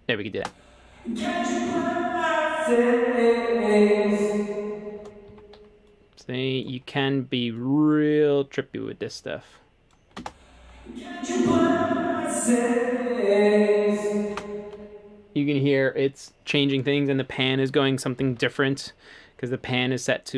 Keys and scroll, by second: 4.2 space, 5.3 super+z, 10.2 space, 14.3 space, 18.3 a.